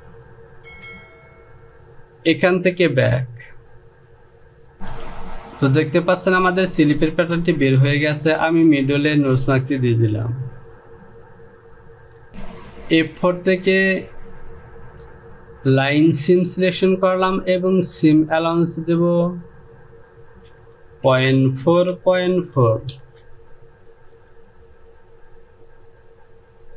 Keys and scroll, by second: 12.3 Home, 21.2 Down, 21.6 KP_Decimal, 22.2 KP_4, 22.4 Down, 22.6 KP_Decimal, 23.1 KP_4, 23.4 Down.